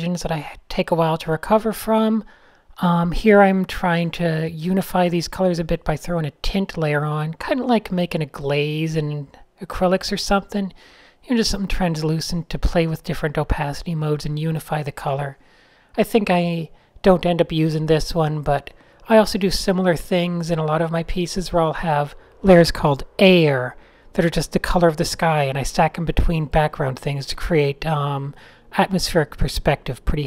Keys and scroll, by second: 0.0-0.8 typing, 2.3-3.3 typing, 4.9 fn+F10, 5.0 Return, 6.1 g, 10.2-11.8 typing, 18.3 g, 20.6 super+z, 23.5 a, 25.7 shift+9, 26.3 super+z, 29.1 n.